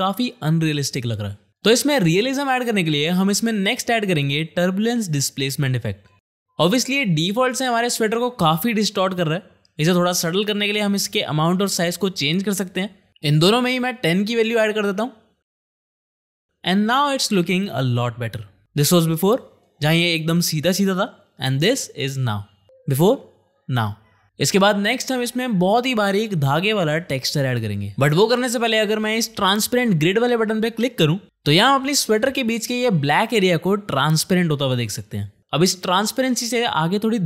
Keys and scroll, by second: 3.9 ctrl+space, 4.4-5.4 typing, 13.5 1, 13.8 0, 14.6 Tab, 14.6 1, 14.9 0, 15.4 Return, 16.6 space, 25.3 space, 31.2 space.